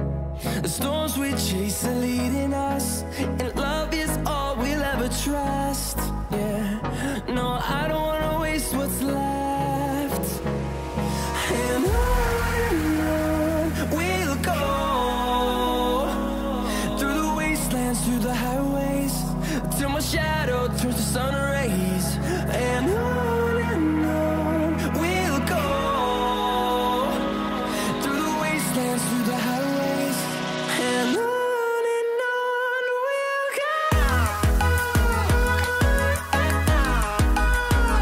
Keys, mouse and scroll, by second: 2.5 click, 7.2 click, 11.6-15.1 drag, 16.5-20.0 drag, 21.0 click, 24.4 click, 26.1 scroll up 1, 30.3 shift+click.